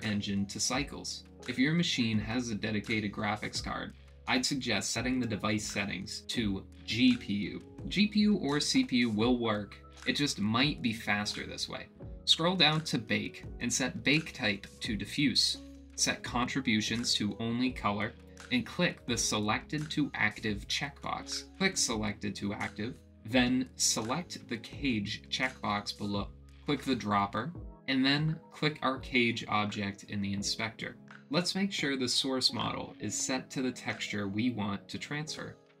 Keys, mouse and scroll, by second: 1.4 click, 3.5 click, 13.1 click, 14.7-17.0 drag, 17.8-19.2 drag, 22.6 click, 26.1 click, 27.2 click, 35.6 click.